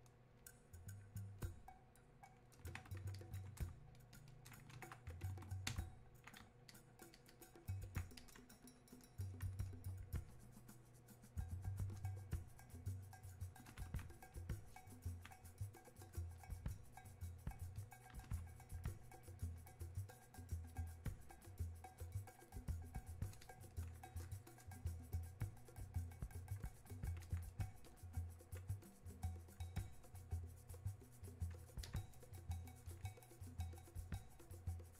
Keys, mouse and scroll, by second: 26.7-34.9 drag.